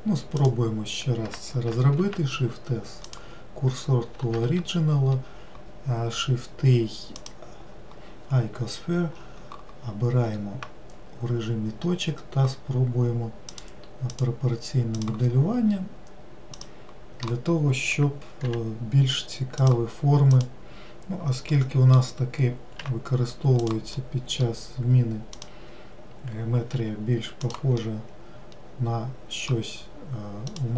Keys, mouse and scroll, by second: 0.9 click, 2.5 shift+s, 4.9 shift+a, 14.0 click, 14.6 click, 17.1 click, 19.0 g, 20.8 click, 22.0-23.3 middle drag, 23.3 g, 24.5-25.9 middle drag, 25.9 click, 27.3 g, 28.3-30.7 middle drag.